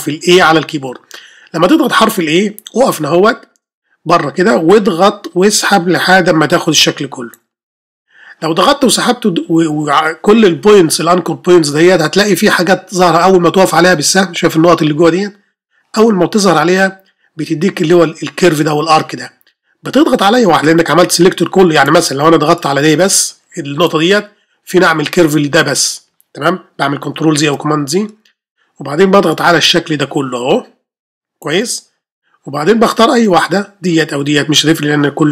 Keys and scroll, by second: 0.5 ش, 27.4 super+ئ.